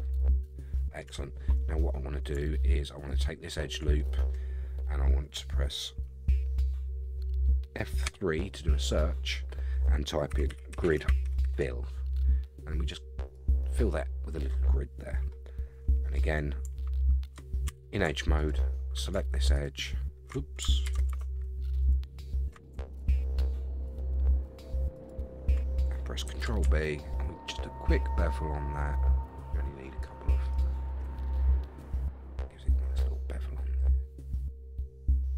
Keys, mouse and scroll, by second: 1.1 Tab, 1.5-2.3 scroll up 1, 2.3 scroll up 1, 3.1 alt+click, 4.0-8.0 middle drag, 8.1 F3, 11.5 l, 15.3 middle click, 17.7 2, 18.4 alt+click, 19.5 alt+shift+click, 20.8 ctrl+z, 21.8 alt+click, 23.0 alt+shift+click, 23.9 alt+shift+click, 24.9 alt+shift+click, 26.3 ctrl+b, 30.5 shift+right click, 31.0 Tab, 31.4 scroll down 2, 31.6-35.3 middle drag.